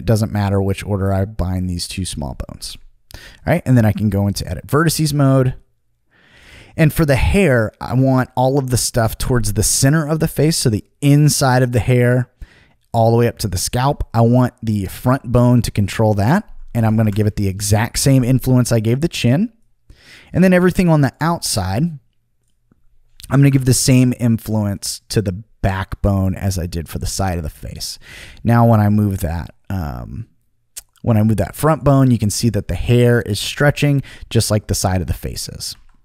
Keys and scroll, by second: 2.6 Return, 16.8 5, 17.0 Return, 23.4 5, 23.5 Return, 35.7 super+z.